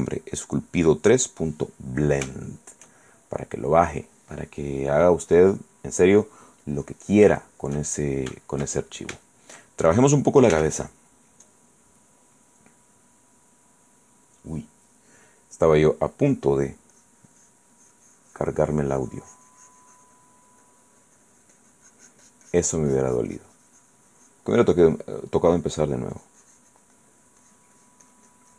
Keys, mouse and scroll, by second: 2.6 shift+middle click, 4.5 click, 5.3 click, 6.8 click, 7.6 shift+right click, 9.6 shift+middle click, 10.7 f, 11.6 click, 17.1 click, 24.9-27.1 drag, 27.2 click.